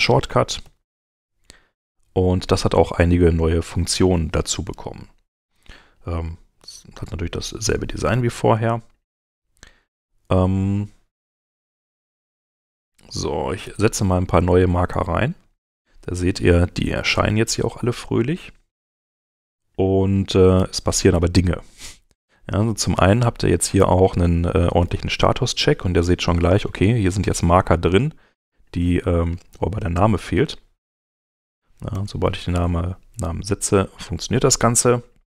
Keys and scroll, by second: 0.6 alt+shift+m, 11.3 Home, 13.6 m, 15.5 m, 18.2 m, 20.5 m, 30.9-31.9 typing.